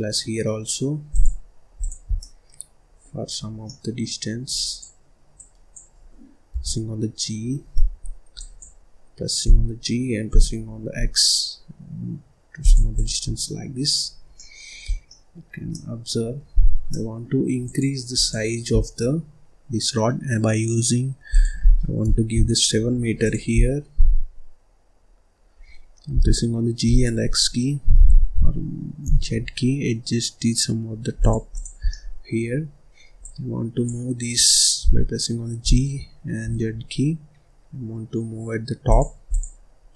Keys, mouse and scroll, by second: 1.7 click, 2.1-3.2 middle drag, 3.2 scroll up 3, 3.4 scroll down 1, 3.6 middle click, 4.4 click, 5.3 click, 6.4 g, 8.2 click, 9.3 g, 12.8 click, 13.1 scroll down 1, 13.3 middle click, 13.9-14.3 scroll up 1, 14.3 middle click, 14.8 scroll down 1, 15.0-16.5 middle drag, 16.5-16.8 scroll up 2, 16.8 middle click, 17.5 click, 18.1 click, 18.6 scroll down 1, 21.2-23.2 drag, 23.4-24.1 scroll down 4, 24.1 scroll up 1, 24.8-26.0 scroll up 1, 26.0 g, 31.4 click, 31.7 scroll down 1, 31.8 middle click, 32.5-33.1 scroll up 1, 33.1 click, 34.7 g, 39.2 click, 39.8-39.9 scroll up 2.